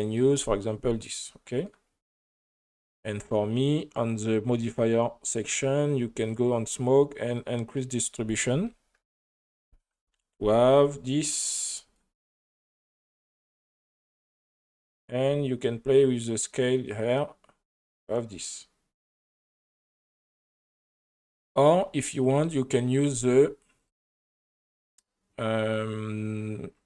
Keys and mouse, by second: 2.2 right click, 6.2 click, 7.7-9.2 drag, 11.1 click, 12.0 shift+middle drag, 13.2 space, 13.4 middle click, 15.7-22.3 drag, 23.1 space, 23.8 click, 24.6 click.